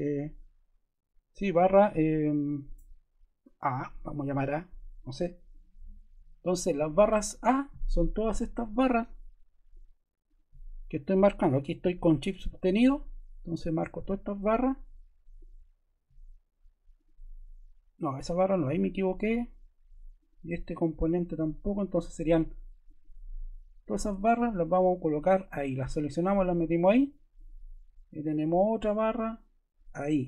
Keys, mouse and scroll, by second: 0.0-2.1 typing, 3.5 typing, 5.4 click, 21.7 click.